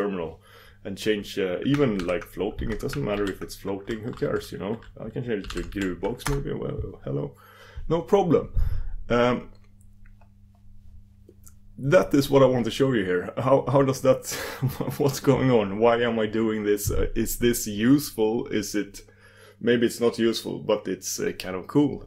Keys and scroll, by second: 2.0 super+v, 3.5 super+d.